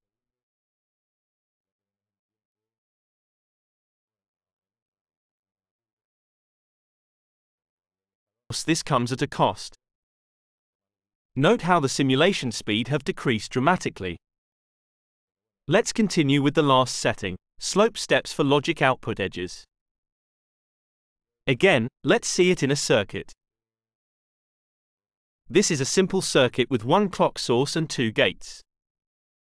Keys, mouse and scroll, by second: 0.4 click, 2.0-7.6 drag, 8.2 click, 9.3 BackSpace, 9.6 Return, 17.1 click, 18.3 click, 19.3 click, 20.9 click, 22.5 click, 24.2 click, 25.2 click, 26.7-28.1 drag, 28.2-29.4 middle drag.